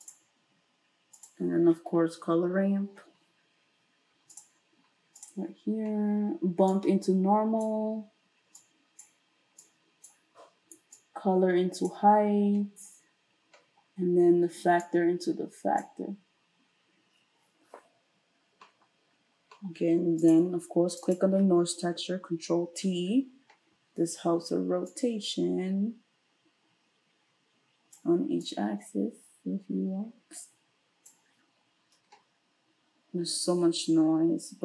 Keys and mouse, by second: 1.9 space, 6.7-20.3 drag, 20.3-21.0 middle drag, 21.0 click, 21.2-24.9 middle drag, 22.2 ctrl+t, 24.9-34.6 drag.